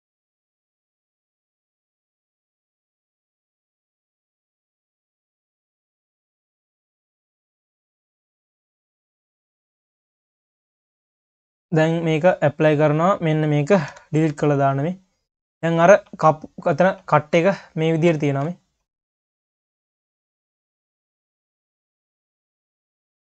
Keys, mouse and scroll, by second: 0.1 click, 1.0 ctrl+z, 1.4 q, 2.5 click, 3.0 q, 3.4-3.7 scroll down 3, 3.7 click, 4.2 click, 4.7 q, 5.6 click, 6.1 q, 7.1 scroll up 1, 7.3 click, 7.8 q, 9.1-9.5 scroll up 4, 9.5 q, 10.2 q, 11.9-13.2 drag, 13.9 Delete, 14.2-14.7 scroll down 1, 14.7 q, 16.2-16.6 scroll down 2, 16.6 q, 17.1 scroll down 1, 17.4 q, 18.4 ctrl+s, 18.6 scroll down 2, 18.8 q, 19.7 KP_3, 20.1 ctrl+s, 20.5 q, 21.7 q, 22.1-22.6 scroll up 1, 23.2 scroll up 2.